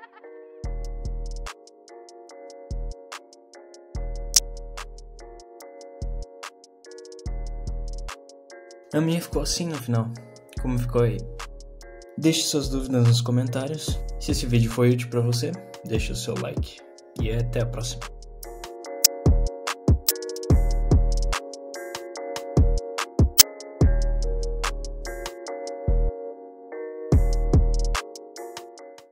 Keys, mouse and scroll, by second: 0.4 middle click, 0.8 click, 2.3 click, 2.5 click, 2.9 middle click, 3.4 middle click, 4.3 g, 4.9 click, 5.1 middle click, 5.4 g, 6.7 click, 6.7 g, 7.3 click, 7.3 g.